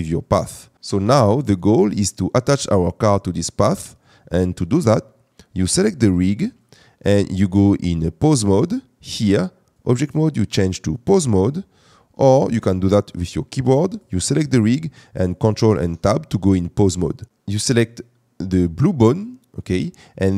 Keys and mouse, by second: 6.6 click, 9.9-11.2 drag, 12.4 ctrl+Tab, 15.7 ctrl+Tab.